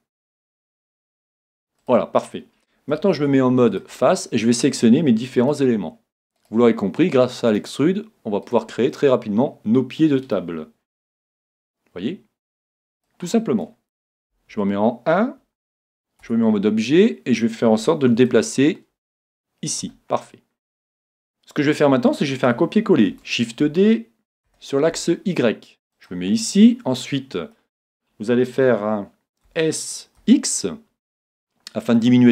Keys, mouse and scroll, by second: 3.1 ctrl+Tab, 5.5-10.2 right drag, 8.9-10.8 middle drag, 11.0 e, 13.1-15.0 drag, 14.5 KP_1, 16.2 Tab, 18.3-20.2 drag, 20.2-23.2 middle drag, 23.1 shift+d, 26.0-27.8 drag, 26.4-28.3 middle drag, 29.5 s, 32.1-32.3 drag.